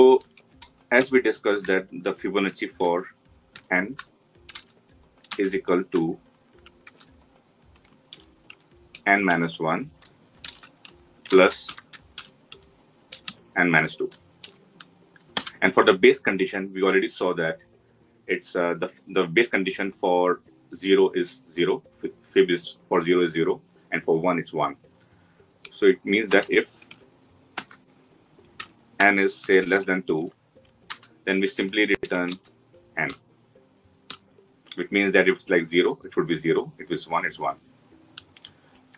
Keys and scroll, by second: 27.4 Return.